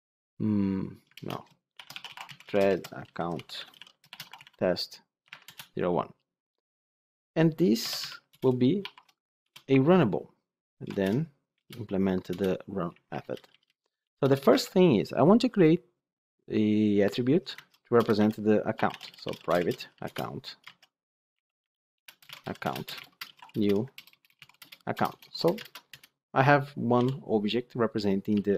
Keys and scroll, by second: 1.1 ctrl+BackSpace, 8.2 Return, 10.8 alt+Return, 20.0 Return, 20.5 Return, 21.4 ctrl+z, 21.9 Return, 25.5 Return, 25.6 ctrl+space, 25.8 Return.